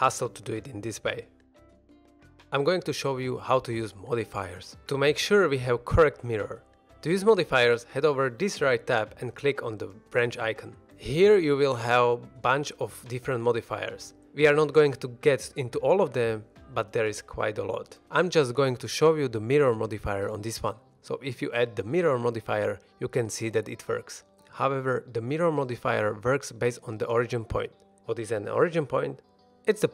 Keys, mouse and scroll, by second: 2.2 x, 3.2 shift+middle drag, 3.5 middle click, 6.8 middle click, 10.4 click, 11.0-21.9 drag, 19.8 middle click, 24.1 middle click, 24.5 middle click, 25.8 middle click, 29.6-29.9 middle drag.